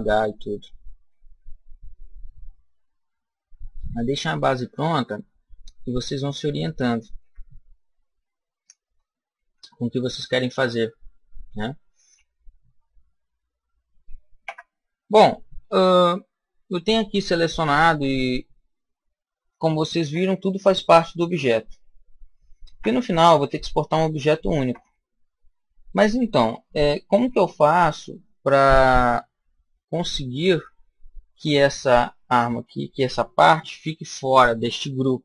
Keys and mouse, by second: 4.6-6.5 middle drag, 7.1 KP_1, 9.5-15.3 middle drag, 14.3 Tab, 19.9 Tab, 21.3 Tab, 22.6 Tab, 24.5 Tab.